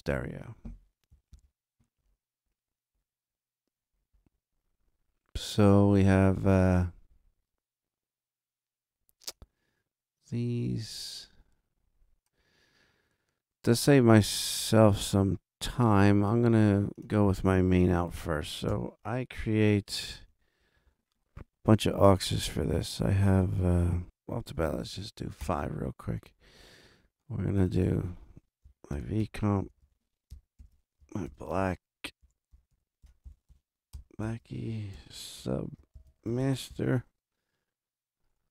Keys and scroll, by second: 1.3 super+=, 18.7 shift+super+n, 20.3 super+Right, 20.6 super+Down, 24.5 5, 25.4 Return, 28.7-30.3 typing, 30.6 super+Down, 31.3 shift+super+b, 31.6-34.0 typing, 34.2 super+Down, 34.9 shift+super+s, 35.1-37.2 typing.